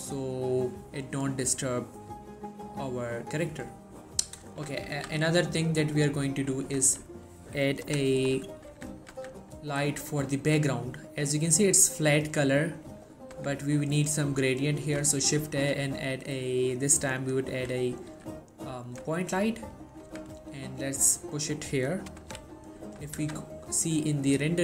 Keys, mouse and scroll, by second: 5.0 z, 5.6 scroll down 1, 5.7-6.4 middle click, 6.4 scroll down 1, 6.6 middle click, 7.0 shift+middle click, 8.4-8.8 scroll up 1, 8.8 z, 9.2 z, 13.5 z, 13.8 scroll down 1, 13.9 middle click, 14.2 3, 14.5 scroll down 1, 14.7 middle click, 15.3 shift+a, 17.3 click, 17.6 3, 18.0 scroll up 1, 18.2 g, 19.0 click, 19.3 shift+middle click, 19.5-19.8 shift+scroll down 2, 19.8 middle click, 20.2 z, 20.6 scroll up 1, 20.7-21.3 middle drag, 23.3 z.